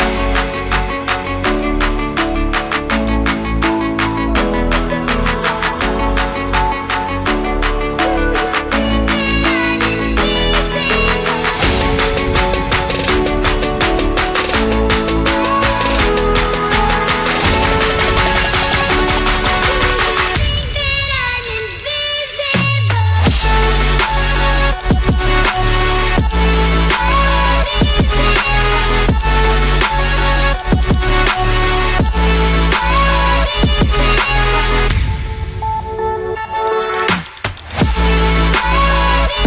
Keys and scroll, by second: 5.5 ctrl+d.